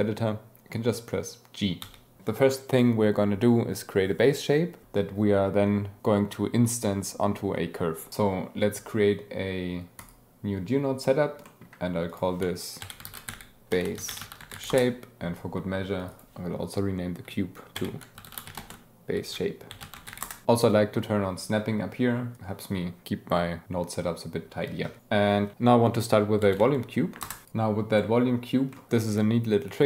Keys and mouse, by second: 10.0 click, 11.5 click, 11.6-12.1 middle drag, 14.7-16.0 middle drag, 16.1-17.4 middle drag, 19.4 click, 25.0 g, 27.4 click, 28.7 click.